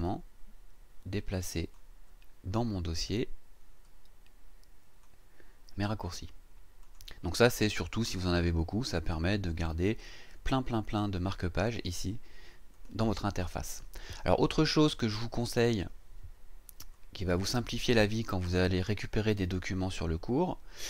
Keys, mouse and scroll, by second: 0.0-1.9 drag, 2.9-5.2 drag, 6.8 click, 7.7 click, 12.7 click, 16.9 click, 18.4 click.